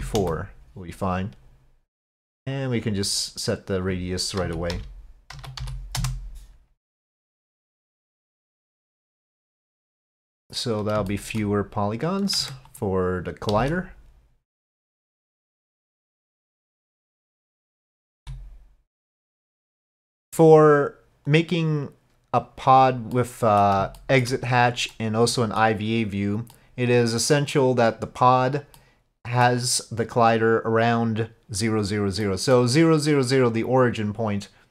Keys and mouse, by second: 2.6-6.7 drag, 7.8-10.8 drag, 11.1 shift+click, 12.4 Tab, 12.7 click, 13.6 s, 15.5-17.2 drag, 18.2 s, 21.4-22.5 drag, 23.2 middle click, 24.0 shift+click, 25.0 click, 26.5-27.6 drag, 28.8 click, 32.3 middle click.